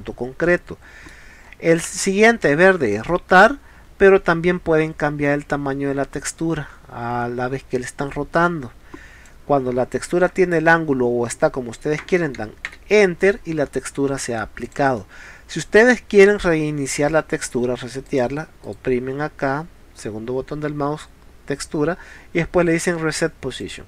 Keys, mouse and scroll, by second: 0.5 middle click, 1.5 middle click, 2.9-4.1 drag, 13.7 middle click, 14.7 click, 15.0-16.3 middle drag, 18.1 click, 18.7 right click, 23.7 click.